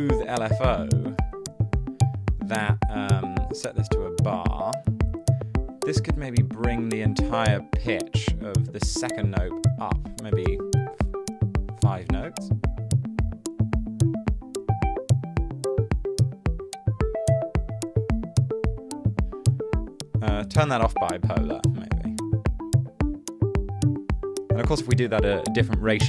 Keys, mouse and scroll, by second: 0.1-1.2 typing, 10.3 7, 10.5 Return, 25.5-26.0 typing.